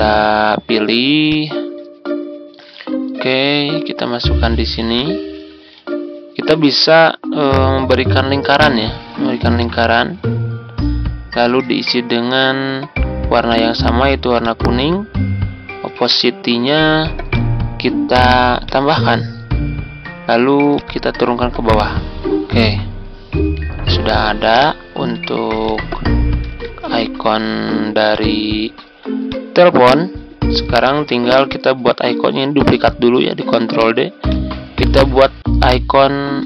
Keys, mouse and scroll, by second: 3.0-5.4 drag, 5.8-6.1 ctrl+scroll up 1, 13.4-20.1 drag, 21.8 ctrl+Page_Down, 24.5 ctrl+click, 25.6 shift+click, 26.4-26.8 typing, 28.1 ctrl+click, 29.2 click, 30.9 ctrl+d, 31.4-33.4 drag, 33.7 click, 35.2 Delete, 36.2-36.4 typing.